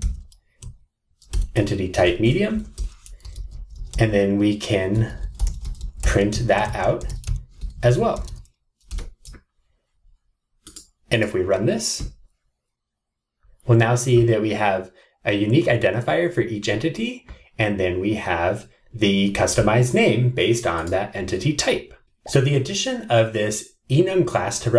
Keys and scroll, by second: 1.4 Return, 8.9 Return.